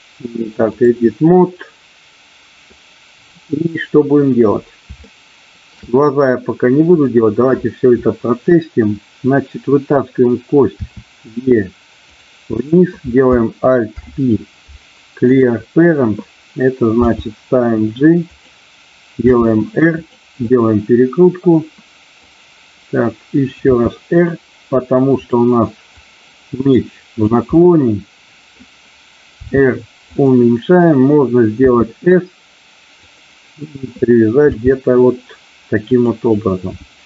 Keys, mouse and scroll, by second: 1.4-2.6 middle drag, 5.1 shift+middle click, 10.9 e, 12.0 click, 12.6 click, 13.9 alt+p, 17.0 g, 18.2 click, 19.2 r, 20.0 click, 20.4-22.2 middle drag, 23.6 r, 25.2 click, 25.9-27.1 drag, 27.6-28.6 middle drag, 29.4 r, 30.1 click, 31.6 s, 33.0 click, 34.5 g, 35.9 click.